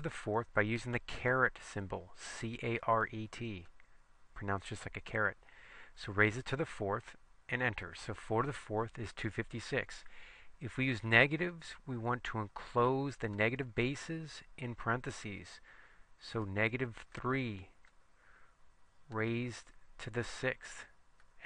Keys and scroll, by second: 3.8 ^, 6.5 4, 7.6 Return, 13.5 (, 17.2 3, 17.9 ), 19.2 ^, 20.5 6, 21.3 Return.